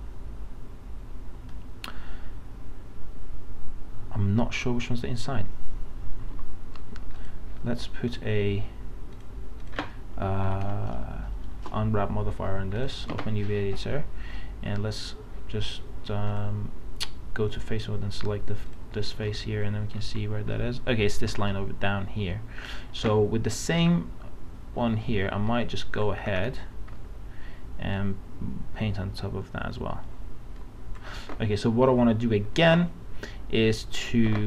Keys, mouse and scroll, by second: 6.3 alt+Tab, 7.3 click, 10.5 u, 11.7 Return, 14.9 middle click, 16.4 click, 19.4 middle click, 20.0 scroll up 1, 20.6 middle click, 21.3 alt+Tab, 24.9 alt+scroll up 1, 26.2 scroll down 1, 26.9 scroll up 1, 27.9 click.